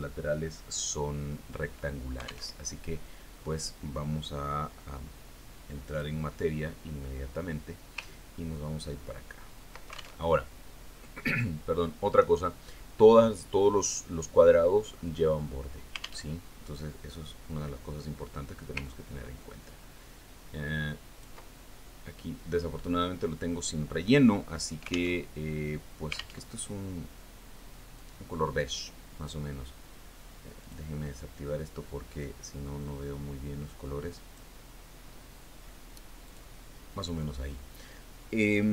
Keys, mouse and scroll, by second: 4.0 alt+Tab, 7.4 click, 9.9-10.9 ctrl+scroll up 6, 11.8 ctrl+alt+Tab, 17.8 alt+Tab, 20.4-22.9 ctrl+drag, 26.8 alt+Tab, 27.9 alt+Tab, 29.5-31.0 drag, 32.1 click, 33.7-36.1 drag, 37.8 click.